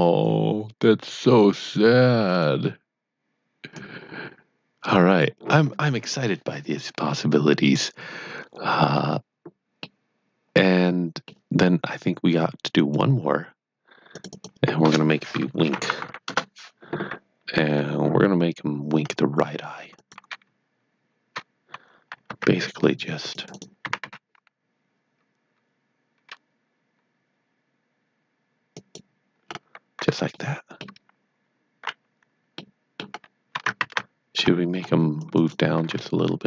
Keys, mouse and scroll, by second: 9.8 middle click, 12.7 click, 14.3 double click, 16.2 Return, 17.6 Tab, 19.0-19.9 scroll up 1, 20.0 click, 22.2-22.9 scroll down 2, 22.4 c, 23.3 click, 23.4 right click, 23.8 typing, 28.7 click, 29.5 scroll up 1, 30.4 shift+middle click, 33.3 scroll down 1, 34.4 scroll up 1, 35.2 click, 35.3 right click, 35.5-36.4 typing.